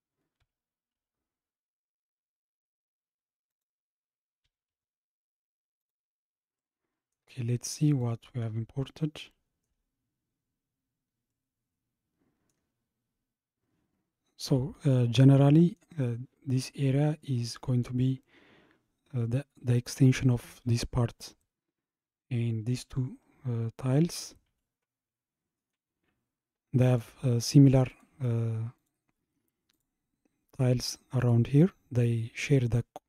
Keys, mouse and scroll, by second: 0.4 g, 4.4 g, 6.6-7.9 middle drag, 7.9 click, 8.8-10.0 shift+middle drag, 10.0-10.6 scroll up 3, 11.3-13.3 middle drag, 13.3 scroll down 2, 15.1-17.3 middle drag, 17.3-18.1 scroll down 1, 21.8-22.1 scroll up 2, 23.2-26.2 middle drag, 26.2 scroll down 2, 26.9 click, 27.9 click, 28.8 click, 29.8 click, 31.2 click.